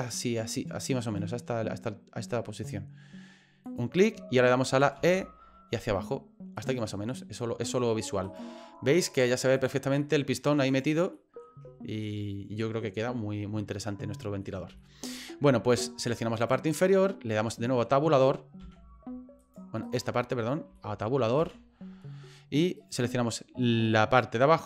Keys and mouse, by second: 5.0 e, 7.0 middle click, 7.8 middle click, 8.2 right click, 9.2 click, 10.0 middle click, 10.7 right click, 11.2 middle click, 12.0 middle click, 13.8 middle click, 14.4 middle click, 14.8 shift+middle click, 15.8 shift+middle click, 16.3 right click, 17.6 middle click, 18.6 a, 19.4 right click, 19.8 right click, 20.7 shift+middle click, 21.4 Tab, 22.8 right click, 23.8 middle click.